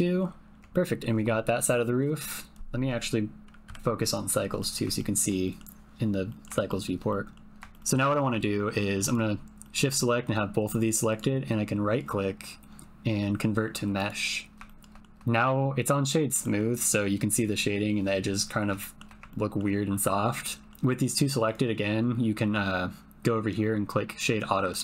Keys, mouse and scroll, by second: 0.1 middle click, 0.4 click, 0.6 middle click, 3.6 KP_Decimal, 4.5 middle click, 5.0 shift+middle click, 5.4 middle click, 6.3 middle click, 6.6 shift+middle click, 7.2 click, 7.7 ctrl+shift+click, 9.1 shift+click, 9.6 shift+click, 11.1-14.2 drag, 14.6 shift+middle click, 15.0 shift+middle click, 16.4 middle click, 18.8 shift+middle click, 19.3 ctrl+middle click, 20.4-21.4 middle drag, 21.4-24.8 right drag.